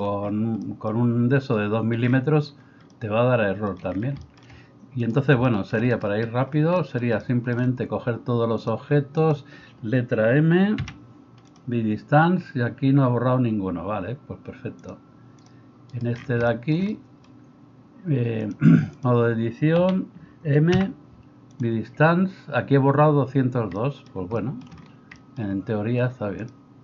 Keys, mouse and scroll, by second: 5.0-5.4 middle drag, 5.0-5.4 right drag, 10.8 m, 15.9 right click, 19.9 a, 20.7 m.